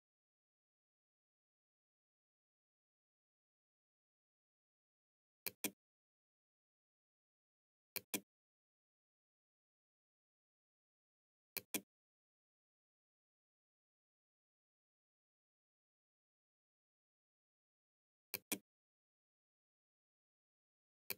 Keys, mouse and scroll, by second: 4.5 click, 6.8 click, 10.6 click, 17.3 click, 20.1 click.